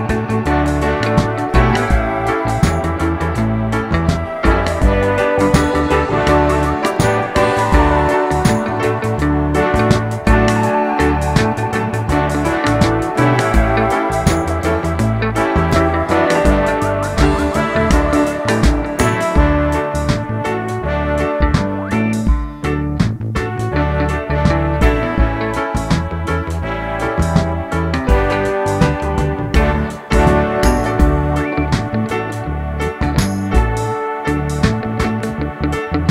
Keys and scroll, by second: 3.9 Page_Down, 4.3 Page_Down, 4.4 Page_Down, 4.9-8.3 Page_Down.